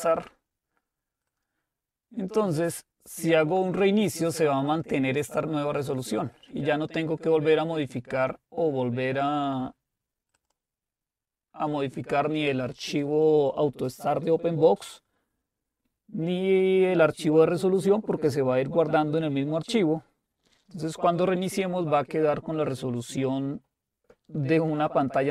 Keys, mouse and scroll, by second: 1.3-8.0 drag, 10.4 click.